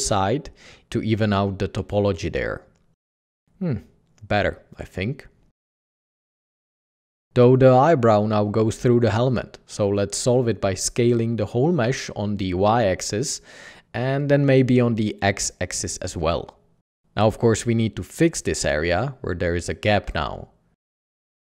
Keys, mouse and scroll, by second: 0.2 c, 1.0 g, 1.1 g, 2.8 typing, 3.5 Tab, 4.1 typing, 4.3 alt+a, 10.9-11.5 typing, 14.3 typing, 16.1 typing, 16.6 alt+a, 18.8 Tab, 19.5 Tab, 19.9 Tab.